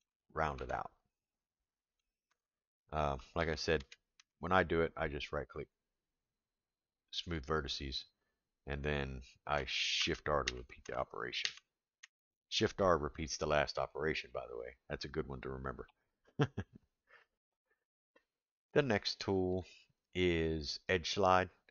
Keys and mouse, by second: 0.5 Tab, 1.2-2.0 middle drag, 2.3 Tab, 3.4 ctrl+z, 3.8 ctrl+z, 5.4-7.4 right drag, 10.0 shift+r, 19.5 click.